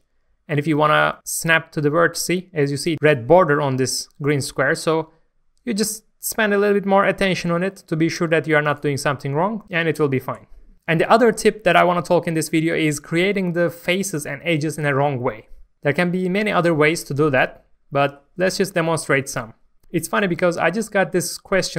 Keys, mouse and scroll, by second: 8.7 right click, 9.4-10.2 scroll down 1, 17.5-21.7 middle drag.